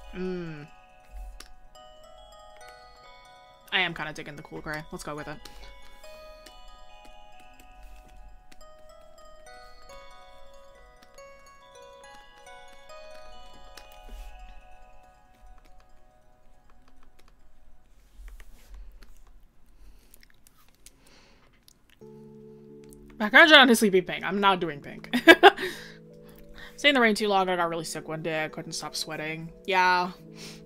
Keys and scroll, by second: 23.3 scroll down 1, 24.8 scroll up 1.